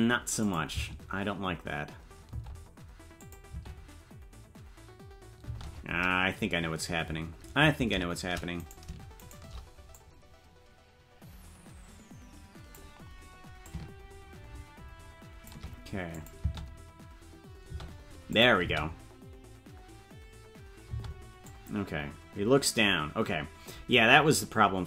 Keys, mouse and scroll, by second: 0.4 click, 0.7 space, 2.5 space, 3.2 click, 3.5 space, 7.0 space, 8.7 right click, 9.3 shift+right click, 9.9-12.8 drag, 13.6-15.5 drag, 16.1 click, 16.4 space, 18.3 click, 18.3 space, 18.6 space, 21.4-24.8 drag, 21.4 space.